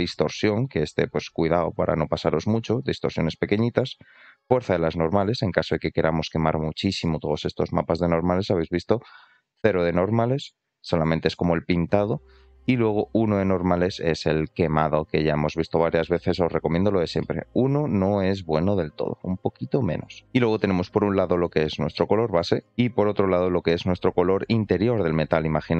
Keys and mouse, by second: 4.5-5.5 drag, 5.9-6.7 shift+middle drag, 8.8-10.9 drag, 12.6-14.2 drag, 15.1 middle click, 17.2 middle click, 18.1-20.0 drag, 20.5 shift+middle click, 22.9 click.